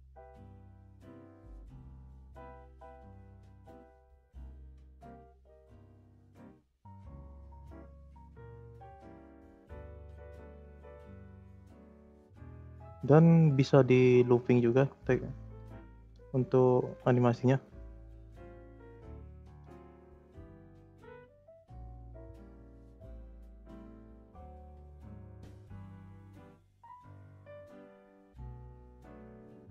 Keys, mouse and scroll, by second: 0.1 space, 1.0 space, 1.8 scroll up 5, 2.0-2.5 middle drag, 2.7-3.4 scroll up 9, 3.4-6.4 drag, 7.6 space, 8.5 space, 9.1-9.6 drag, 9.6 space, 10.5 space, 10.9-12.7 drag, 13.8 click, 16.7 ctrl+c, 17.1 click, 17.5 ctrl+v, 18.1-20.2 drag, 20.8 click, 21.2 Delete, 21.6-22.2 drag, 22.2 space, 24.3 space, 24.8-28.6 drag, 28.9-29.4 scroll up 5, 29.4-29.7 middle drag.